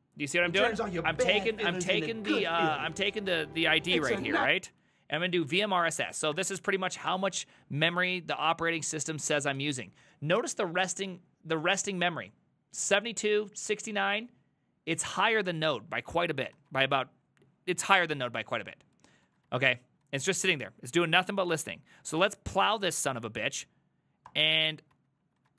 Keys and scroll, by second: 4.3 ctrl+a, 4.5-6.5 typing, 7.1 Return, 16.6 ctrl+a, 16.9 ctrl+a, 19.3 ctrl+a, 19.5 ctrl+a, 20.1 ctrl+a, 20.7 ctrl+a, 21.1 Up, 24.3 Return, 24.6 ctrl+a, 25.0 ctrl+a, 25.4 ctrl+a.